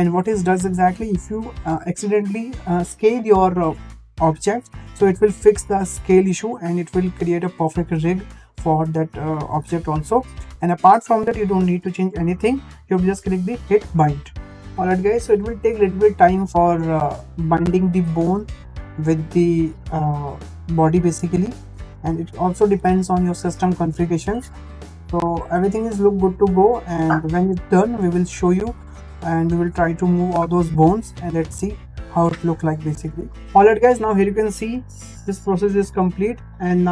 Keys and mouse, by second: 11.5 shift+middle click, 14.2-33.4 drag.